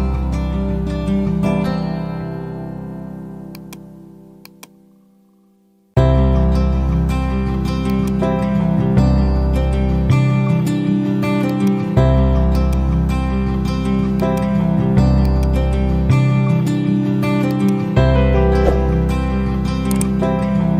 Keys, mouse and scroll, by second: 7.5-8.3 typing, 20.2-20.7 typing.